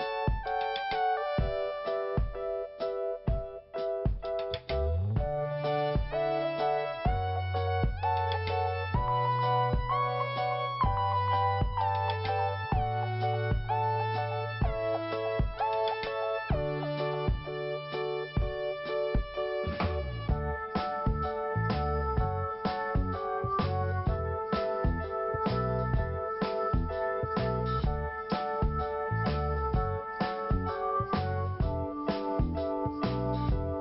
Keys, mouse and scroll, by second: 2.4 right click, 2.5 right click, 3.0 right click, 3.1 right click, 3.5 right click, 3.6 right click, 5.7 click, 5.9 click, 15.5 right click, 15.5 right click, 16.6 Delete, 18.8 click, 18.9 click.